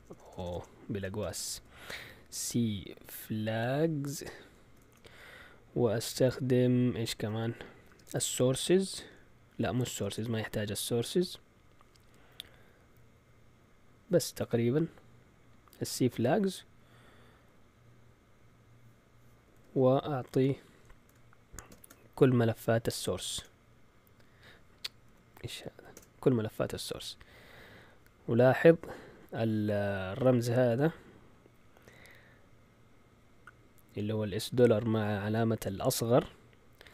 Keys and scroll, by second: 0.0-5.3 typing, 7.8-8.7 typing, 10.0 BackSpace, 21.7 shift+,, 23.3 Print, 25.0 Escape, 25.9 Delete, 25.9 typing.